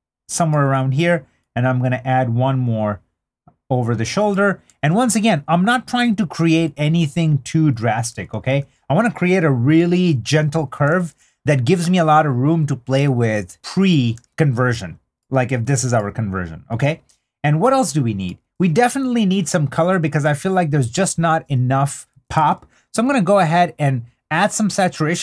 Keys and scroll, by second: 4.8 super+d, 8.1 super+d, 12.1 super+d, 14.2 super+d.